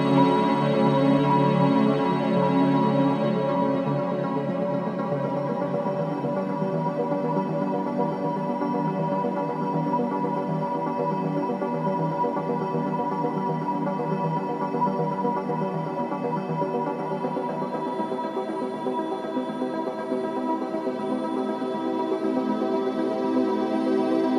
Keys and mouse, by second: 0.5 0, 1.6 click, 2.1-3.4 ctrl+alt+drag, 3.5 ctrl+s, 4.2 click, 5.3 click, 6.6-7.9 ctrl+alt+drag, 10.3 click, 11.8-13.0 drag, 14.2-21.7 drag, 22.1 click, 23.2-24.3 drag.